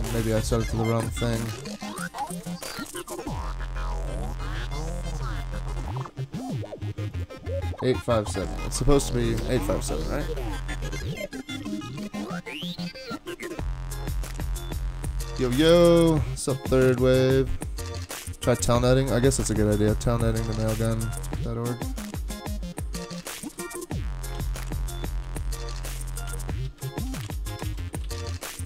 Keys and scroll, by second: 0.0 super+Tab, 0.2 super+Tab, 2.2 alt+super+0, 13.9 alt+super++, 21.3 super+c, 21.4 super+Tab, 22.0 super+Tab, 22.1 super+Tab, 23.4 shift+super+}, 24.4 ctrl+c, 26.3 super+v, 26.6 ctrl+a, 26.9-28.6 typing.